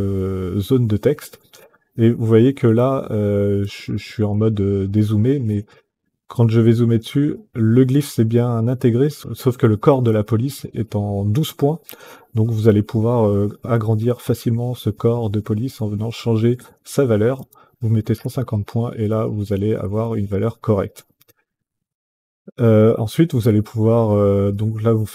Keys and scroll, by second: 16.6 KP_1, 16.9 KP_5, 17.1 KP_0, 17.8 Return.